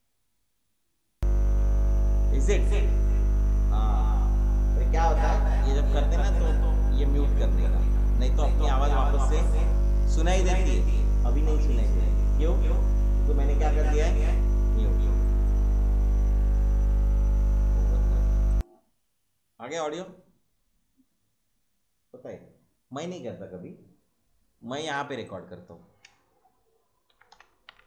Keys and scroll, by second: 27.0-27.8 typing.